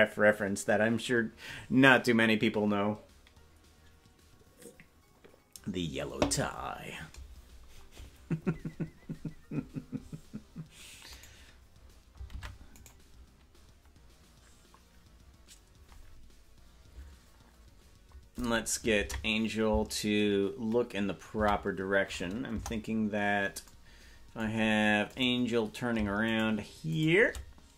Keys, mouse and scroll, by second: 11.3 right click, 12.3 ctrl+Tab, 12.9 right click, 22.5 ctrl+Tab, 22.5 a, 22.5 KP_0, 25.1-26.4 right drag.